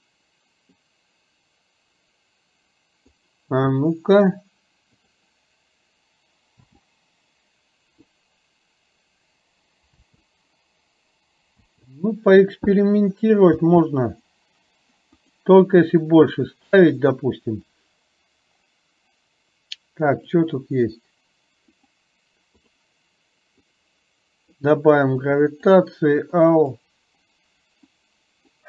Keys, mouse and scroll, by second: 0.8-3.3 drag, 5.0 click, 6.6 space, 10.0 space, 11.9 space, 13.6 space, 20.3-22.6 drag, 23.9 click, 25.4 click, 26.4 click, 28.1 click.